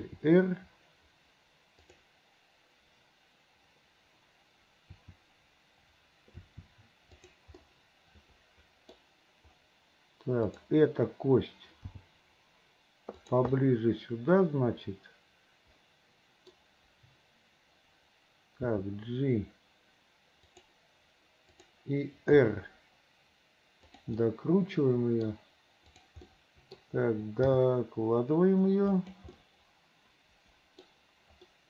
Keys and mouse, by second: 0.1 r, 4.8 click, 6.5 r, 7.8-9.1 drag, 10.6 click, 12.0 g, 13.8-16.7 drag, 18.8 g, 21.6 click, 22.5 r, 24.3-25.4 middle drag, 26.4 middle click, 27.6 g, 29.6-31.1 middle drag.